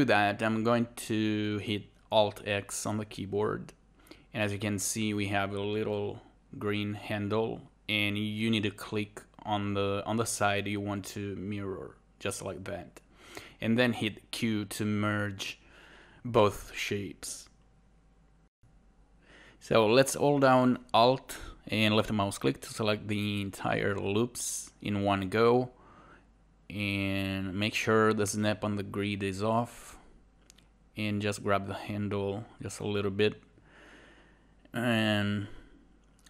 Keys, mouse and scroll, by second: 11.0 click, 15.8 right click, 31.8-36.2 alt+drag.